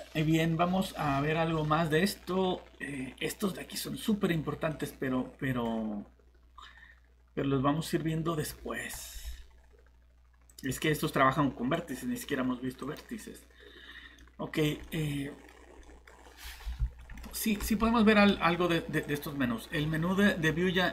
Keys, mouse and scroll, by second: 4.7 middle click, 10.5 click, 14.2 middle click, 15.5 scroll up 1, 15.8 middle click, 16.1 scroll down 1, 17.0 middle click, 19.0 click.